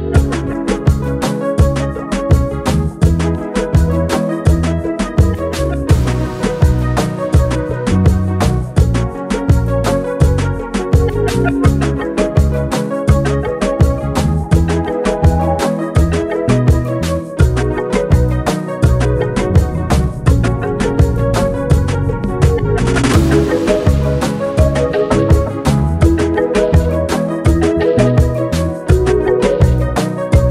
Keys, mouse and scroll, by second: 2.4-4.7 drag, 7.9-10.7 drag, 10.7 ctrl+c, 12.3 click, 14.4 space, 15.5 click, 17.7 click, 19.5-24.5 typing, 25.3-26.9 alt+drag, 26.9-30.4 drag, 30.2-30.5 typing.